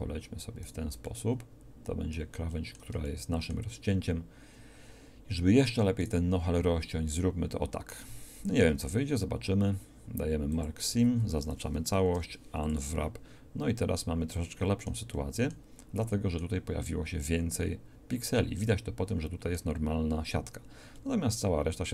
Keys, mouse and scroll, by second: 8.4 ctrl+e, 11.0 a, 11.1 a, 12.2 u.